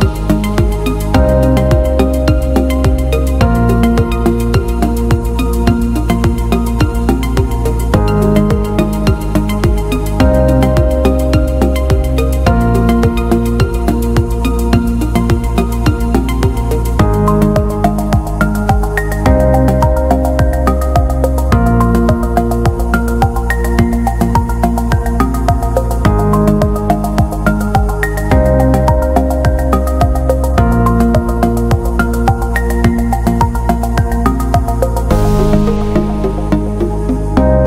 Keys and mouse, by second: 0.3 middle click, 1.0 KP_3, 1.9 right click, 2.2 w, 4.2 right click, 4.7 shift+right click, 5.1 middle click, 6.2 shift+middle click, 6.6 middle click, 7.5 right click, 8.0 shift+right click, 8.3 middle click, 8.8 g, 10.4 middle drag, 11.0 w, 11.9 middle click, 12.8 right click, 13.5 right click, 14.3 m, 15.3 KP_3, 15.9 g, 18.0 ctrl+r, 19.2-20.5 middle drag, 20.5 KP_3, 21.1 middle click, 23.1 alt+z, 23.5 right click, 23.7 g, 25.1 shift+right click, 26.0 m, 26.9 shift+middle click, 27.9 right click, 28.0 g, 28.9 shift+middle click, 30.8 shift+right click, 31.6 f, 32.1 middle click, 32.9 alt+z, 33.3 middle click, 34.2 alt+right click, 34.6 g, 36.4-37.6 middle drag.